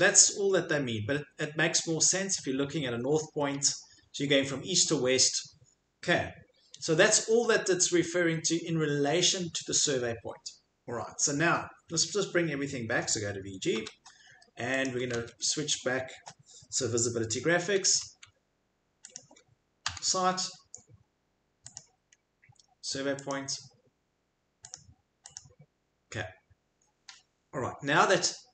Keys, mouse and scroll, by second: 13.7 super+v, 14.9 click, 15.1 super+v, 17.3-18.2 typing, 19.1 click, 19.9 s, 20.5 middle click, 21.7 click, 22.2 middle click, 22.2 middle click, 23.3 click, 24.7 click, 25.3 click, 26.2 middle click, 26.9 middle click.